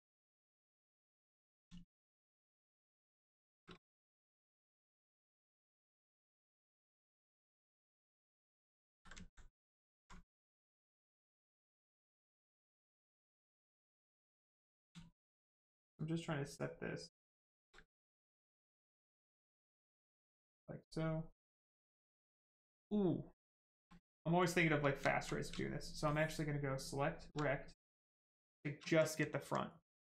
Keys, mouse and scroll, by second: 0.8 ctrl+click, 1.6 shift+click, 8.9 ctrl+z, 9.2 alt+right click, 9.7 alt+right click, 9.8 alt+right click, 10.1 ctrl+right click, 13.1 ctrl+click, 13.7 ctrl+click, 17.4 space, 20.9 right click, 24.5 right click, 24.7 shift+right click, 25.0 alt+right click, 25.4 ctrl+right click, 27.5 shift+right click, 27.5 right click, 28.5 shift+right click, 29.1 alt+right click.